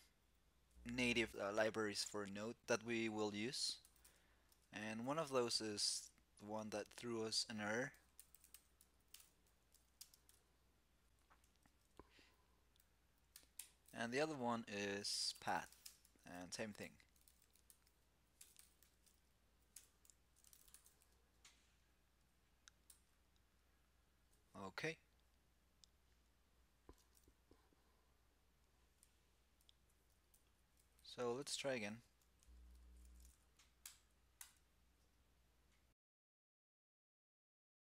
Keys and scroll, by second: 22.6 super+s, 30.7 ctrl+c, 32.4 shift+super+t.